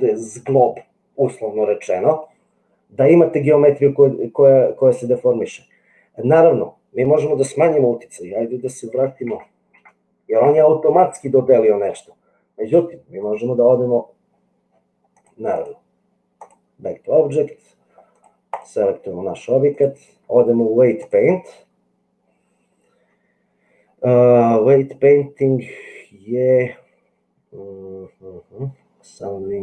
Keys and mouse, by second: 9.0 ctrl+z, 9.3 ctrl+z, 15.1 click, 16.5-18.2 drag, 19.8-21.2 drag.